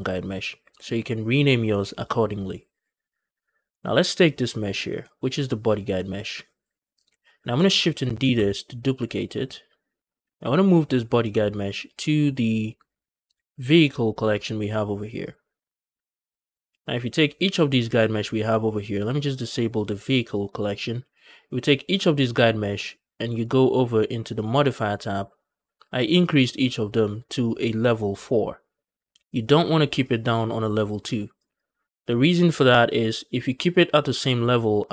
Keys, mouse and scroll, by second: 4.2 click, 8.3 shift+d, 10.2 right click, 11.0 m, 20.2 click, 21.5 click, 24.2 click, 29.8 click, 30.1 click, 31.2 click, 31.4 click.